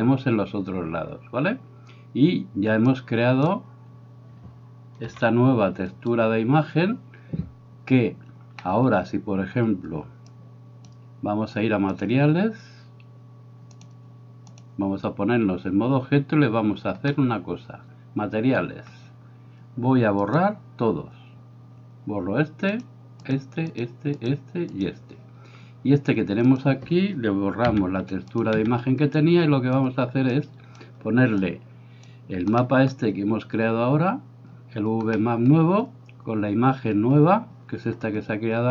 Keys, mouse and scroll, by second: 2.9 click, 5.0 g, 8.7 middle click, 10.4 click, 13.8 click, 17.2 middle click, 20.2-24.3 drag, 27.7 x, 28.3 click, 28.6 x, 29.2 click, 30.4 click, 31.5 click, 32.7-34.6 middle drag, 35.2 middle click.